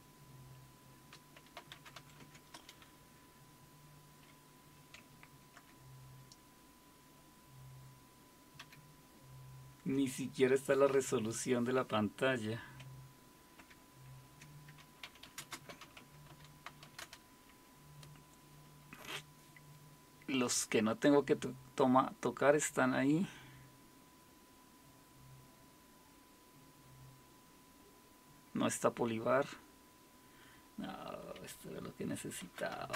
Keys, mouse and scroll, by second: 1.3-2.5 typing, 2.5 Return, 5.6 ctrl+-, 8.6 ctrl+-, 13.6 ctrl+-, 14.8-17.2 typing, 32.2-32.9 typing.